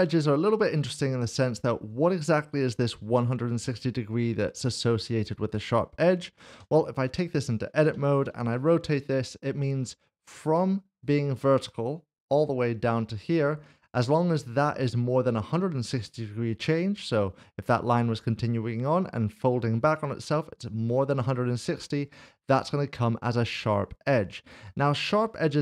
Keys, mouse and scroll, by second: 6.5 click, 7.1 Tab, 7.9-8.4 typing, 13.8 click, 25.3 click.